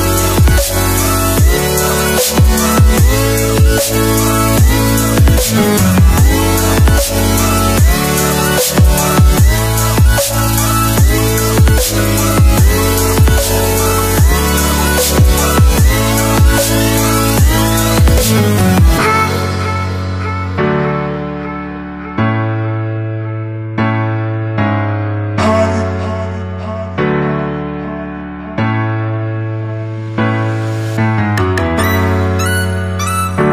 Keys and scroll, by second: 30.7 ctrl+e.